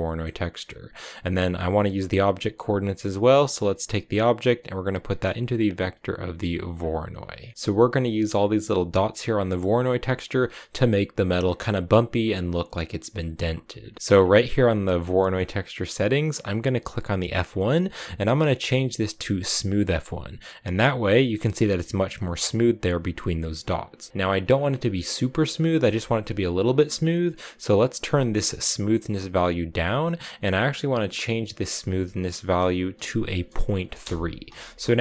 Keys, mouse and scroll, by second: 0.3 scroll up 2, 0.7 click, 3.5-6.6 drag, 7.3 middle click, 9.9-13.0 scroll down 1, 13.6 scroll down 1, 13.7 middle click, 13.9-14.9 scroll up 3, 14.9-17.1 middle drag, 17.1-20.2 drag, 21.1-23.2 scroll up 4, 23.2 scroll up 1, 23.5-25.5 scroll down 3, 25.5 middle click, 25.7-27.7 scroll up 3, 27.7-30.7 drag, 31.3-34.3 drag, 34.7-35.0 scroll up 2.